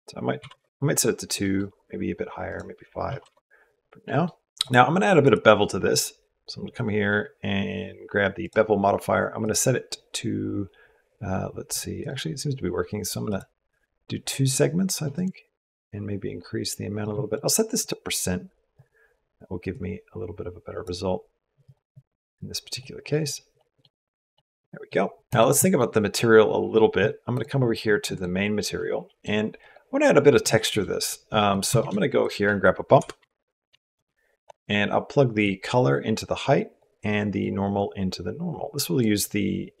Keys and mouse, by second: 1.2 middle click, 2.3 middle click, 3.8 middle click, 4.3 middle click, 5.1-8.3 middle drag, 9.2-11.5 middle drag, 11.8-13.2 middle drag, 14.9-16.8 shift+middle drag, 17.1 middle click, 17.6-18.7 drag, 19.5-20.7 drag, 21.4 click, 22.6 middle click, 23.2 middle click, 25.1 middle click, 25.4 middle click, 27.2 middle click, 27.9 middle click, 28.8 middle click, 29.5 middle click, 30.4 shift+click, 31.3 click, 31.6 shift+a, 35.2 click, 35.5-36.6 drag, 37.2-38.8 drag.